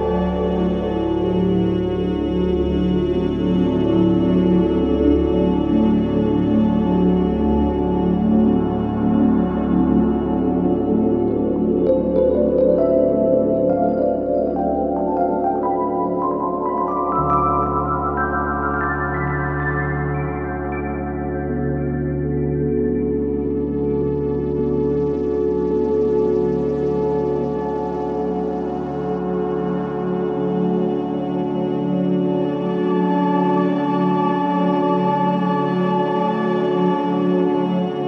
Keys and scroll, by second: 2.5 0, 2.7 Return, 12.9 5, 36.6 4.